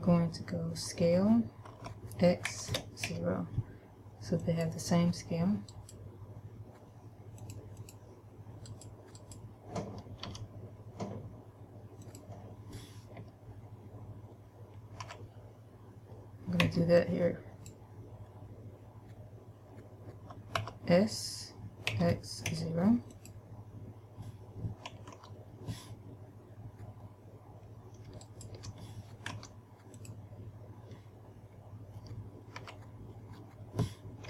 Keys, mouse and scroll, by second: 2.0 s, 4.9 click, 6.0 right click, 7.6 click, 8.9 click, 8.9 right click, 9.6 right click, 10.6 g, 12.5 click, 15.3 a, 16.9 b, 20.9 s, 23.6 click, 25.6 a, 28.6 alt+right click, 29.6 w, 32.8 a.